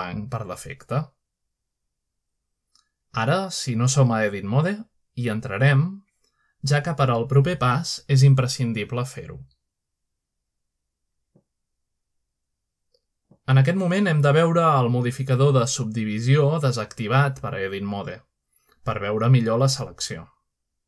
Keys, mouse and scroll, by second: 1.7-2.6 scroll down 1, 3.6-4.4 typing, 6.9-7.3 scroll up 2, 8.9 click, 13.0 Tab, 13.9-16.9 middle drag, 17.1 middle click, 17.4-18.3 scroll up 1, 18.4 shift+middle click.